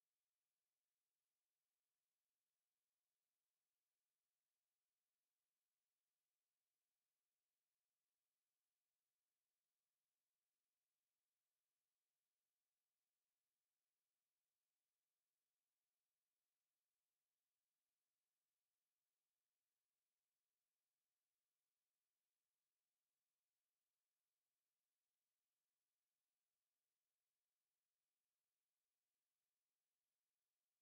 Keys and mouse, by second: 0.0 click, 3.7 alt+right click, 4.2 right click, 4.8 click, 5.5 alt+click, 7.9 alt+right click, 9.2 alt+click, 9.7 alt+right click, 10.4 click, 11.1 alt+click, 12.4 click, 14.1 alt+click, 14.7 alt+middle click, 15.1 alt+click, 15.5 alt+right click, 16.0 right click, 17.7 click, 19.0 alt+click, 20.3 alt+right click, 20.7 alt+click, 21.9 alt+click, 22.7 click, 29.6 alt+click, 30.0 right click.